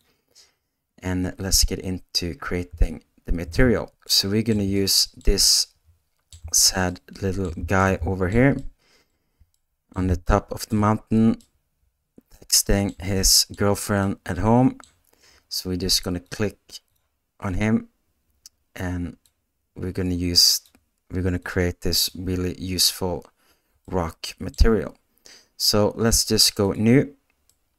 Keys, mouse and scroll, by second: 2.8 shift+middle click, 4.0 ctrl+middle click, 4.7 middle click, 5.6 shift+middle click, 6.8 ctrl+middle click, 7.8 ctrl+shift+middle click, 8.5 middle click, 9.5 ctrl+middle click, 10.2 shift+middle click, 11.4-12.8 middle drag, 13.2 shift+middle click, 14.0 middle click, 19.3-23.6 drag, 23.8-27.7 middle drag.